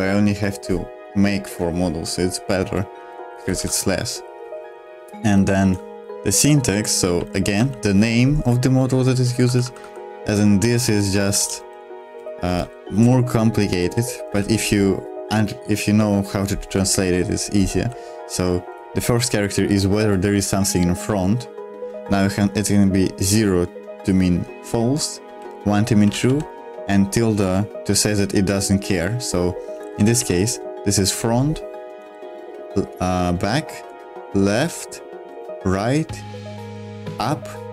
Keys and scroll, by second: 3.2-4.5 typing, 6.4-14.2 typing, 16.7 Escape, 17.0 h, 17.6 h, 17.6 h, 25.2 l, 25.9 l, 26.0 l, 26.2 l, 29.8 h, 29.8 h, 30.0 h, 30.1 h, 32.0 l, 33.9 l, 35.3 l, 36.6 l, 37.6-37.7 typing.